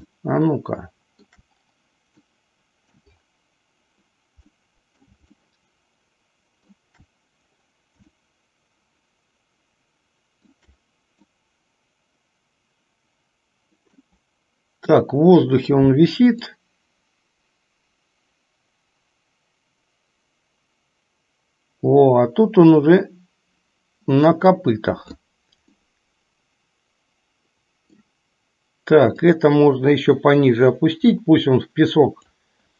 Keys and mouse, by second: 0.4-1.6 shift+middle drag, 2.4 middle click, 4.8 middle click, 5.6-7.1 shift+middle drag, 8.7-10.8 shift+middle drag, 11.5-14.3 middle drag, 17.0-25.7 drag, 26.0-28.3 middle drag, 29.5-32.7 drag.